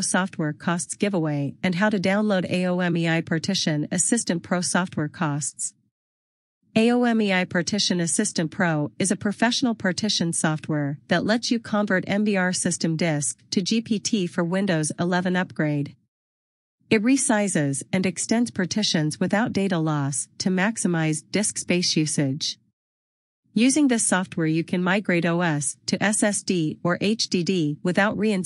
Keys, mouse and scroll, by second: 1.6 scroll down 1, 2.4-2.8 scroll up 1, 8.2 click, 17.2 click, 27.7 click.